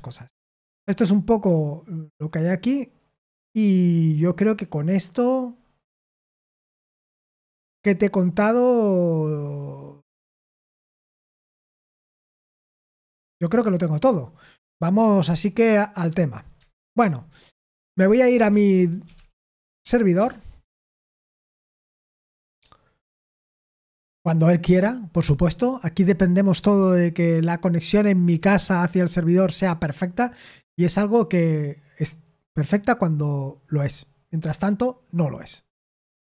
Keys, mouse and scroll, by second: 2.6-3.3 scroll down 1, 3.3-4.4 scroll down 1, 4.4-6.0 scroll up 1, 6.0-9.1 scroll down 4, 9.1-11.2 scroll down 1, 11.2-11.9 scroll down 1, 11.9-12.5 scroll up 3, 12.5-13.4 scroll down 2, 13.4 scroll down 1, 13.7-15.5 scroll up 1, 15.5-16.6 scroll up 1, 16.6-18.1 scroll up 1, 18.1-20.6 scroll up 1.